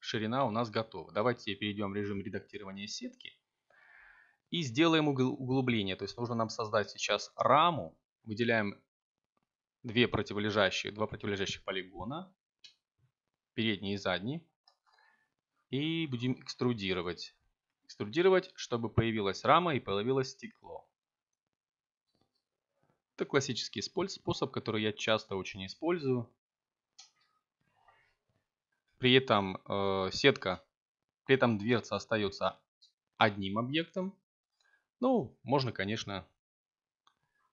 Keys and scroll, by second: 2.6 a, 3.6 ctrl+t, 5.8 c, 11.8 e, 15.4 1, 17.0 3, 20.4 Tab, 27.1 Tab.